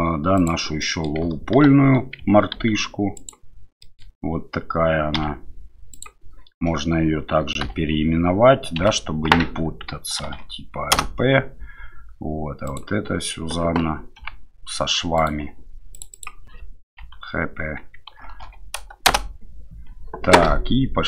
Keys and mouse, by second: 0.8 middle click, 1.7 ctrl+1, 2.5 ctrl+a, 3.8 middle click, 5.1 q, 7.6 2, 8.8 F2, 15.9-19.8 drag.